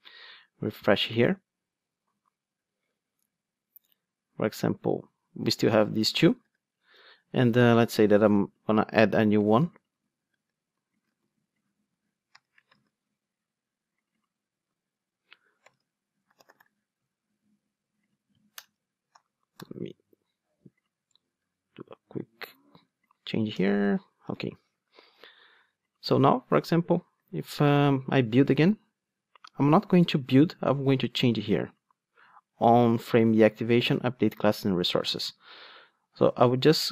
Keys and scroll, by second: 11.2 super+c, 12.8 super+v, 19.5 alt+super+l, 24.3 alt+super+l, 27.8 alt+super+l.